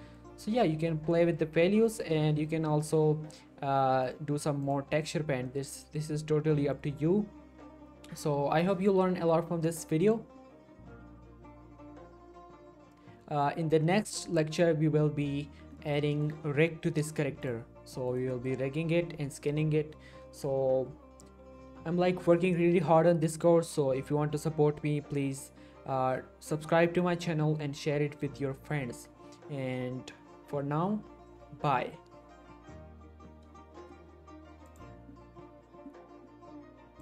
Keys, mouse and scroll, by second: 0.6-1.0 scroll down 1, 1.2 middle click, 4.0 click, 5.0 middle click, 5.5 shift+middle click, 6.4 scroll down 1, 6.6 middle click, 6.8-7.5 scroll up 1, 10.0 click, 15.7 middle click, 16.1 shift+middle click, 17.4 click, 17.8 g, 18.1 right click, 18.3 middle click, 34.7 click.